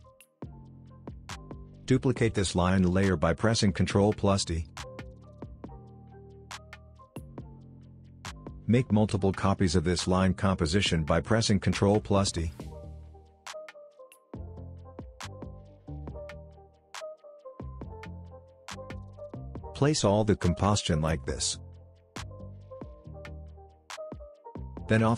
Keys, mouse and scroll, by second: 1.1-2.2 click, 4.7 ctrl+d, 6.0-7.9 drag, 8.7 shift+click, 9.2 ctrl+d, 10.0-12.2 drag, 12.7 ctrl+d, 13.3-17.0 drag, 17.0 ctrl+d, 17.8 ctrl+z, 17.9 ctrl+click, 18.4 click, 19.0 ctrl+d, 20.0-25.1 drag.